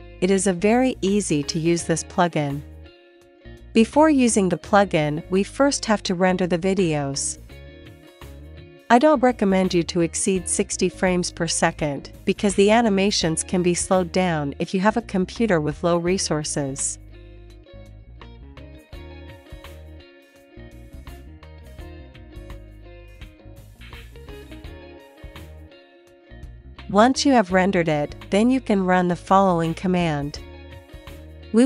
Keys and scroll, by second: 7.6 Up, 8.1 Up, 14.0 Return, 20.7 Left, 21.1 space, 29.5 q, 30.6 q, 30.7 Tab, 30.8 ctrl+l.